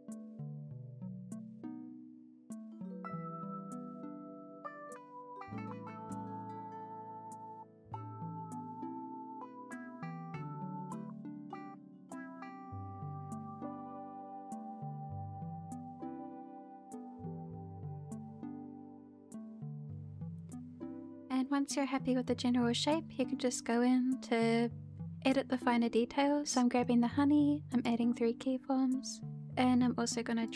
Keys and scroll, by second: 4.2 h, 5.9 h, 7.9 shift+h, 9.1 shift+h, 10.5 h, 11.1 shift+h, 13.9 shift+h, 16.4 h, 17.0 shift+h, 18.4 shift+h, 19.6 h.